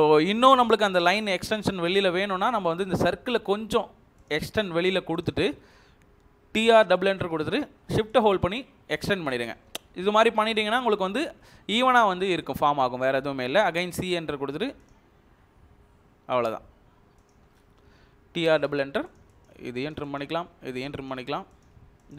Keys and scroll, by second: 2.2 Escape, 5.3 Escape, 6.3-7.0 typing, 9.9 shift+Escape, 10.9 Delete, 13.6 typing, 18.0-18.8 typing, 21.7 Escape.